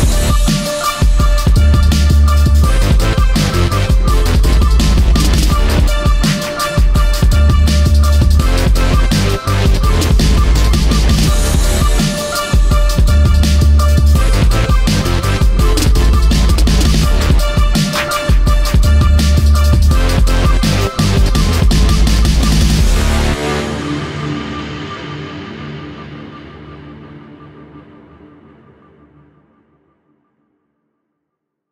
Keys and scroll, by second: 14.3 ctrl+], 20.4 i.